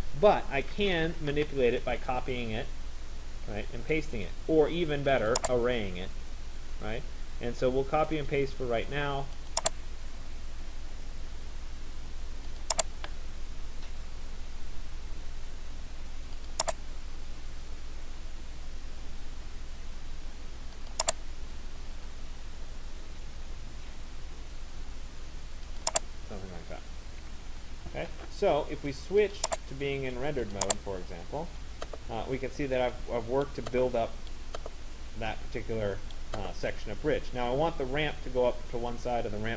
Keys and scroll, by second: 1.1 Return, 26.9 Escape.